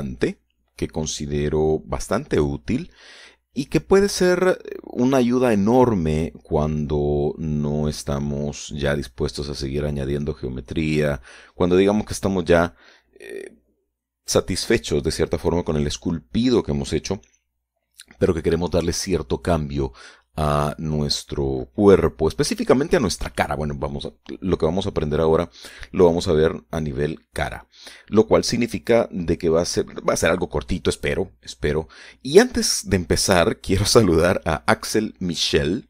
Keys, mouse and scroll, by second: 6.4-6.9 scroll up 4, 7.9-8.4 scroll down 2, 21.1 scroll down 2, 21.4 scroll up 2, 21.6 scroll down 2, 21.6-22.0 scroll up 2, 22.4-22.9 scroll up 2, 22.9-23.4 scroll up 1, 23.8 shift+middle click.